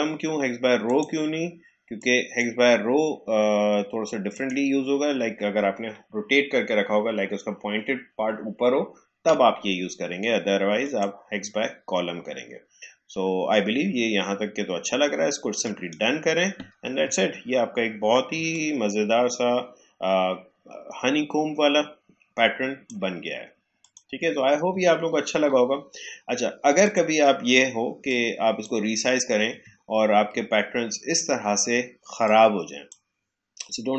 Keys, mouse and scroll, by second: 0.8-4.3 drag, 13.0 click, 15.5 click, 15.9 click, 17.1 alt+scroll down 1, 17.9 alt+scroll up 1, 18.3 space, 18.5 click, 18.7 space, 23.7 click, 24.8-25.4 alt+scroll down 1, 26.8-29.7 drag, 29.7 alt+scroll up 1, 32.2-33.9 drag.